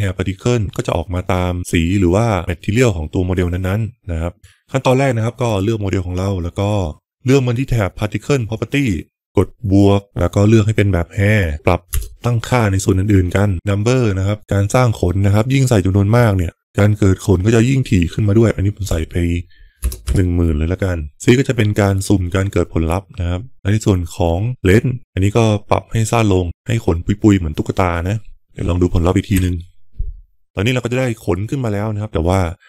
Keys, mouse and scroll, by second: 4.2 click, 5.4 click, 8.3 click, 9.7 click, 11.8 KP_0, 14.4-21.2 drag, 24.9-28.5 drag, 29.8 F12.